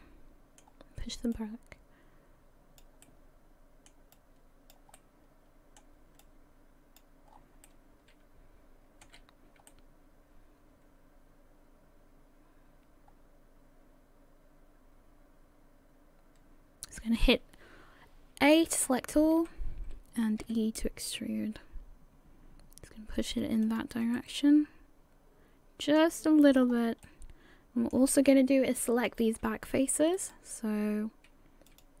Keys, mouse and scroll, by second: 1.3 click, 3.0 middle click, 4.1 click, 4.9 middle click, 6.2 click, 7.3-7.6 scroll down 5, 7.6 middle click, 9.1 a, 9.7 middle click, 18.8 a, 19.0 a, 19.4 a, 20.4 e, 24.2 middle click, 26.4-27.0 scroll up 4, 27.0 middle click, 29.1 click, 30.2 right click, 31.7 click.